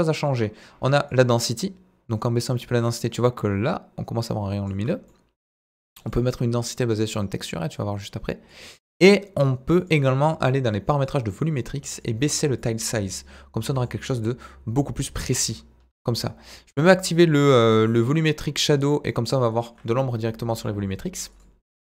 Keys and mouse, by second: 8.6-9.8 drag.